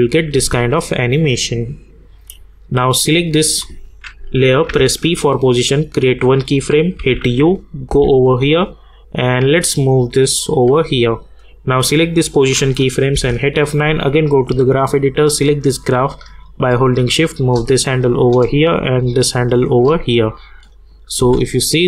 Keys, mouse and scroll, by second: 1.3 click, 4.7 p, 6.0 click, 7.0-8.4 typing, 9.4-11.7 drag, 13.1 click, 14.0-20.4 drag, 21.2 space.